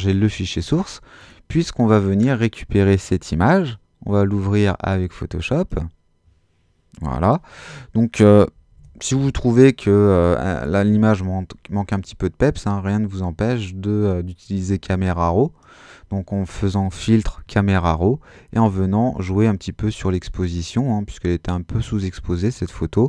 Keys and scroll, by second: 8.7 super++.